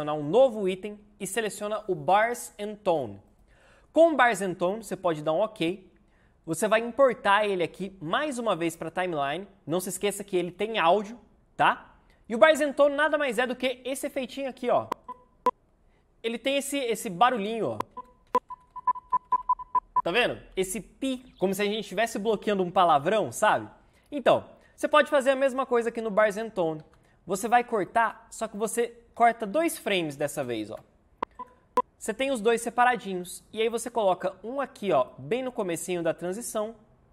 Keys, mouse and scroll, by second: 17.8 Right, 19.1 Left, 26.8 c, 29.4 v, 31.3 click, 33.8 click.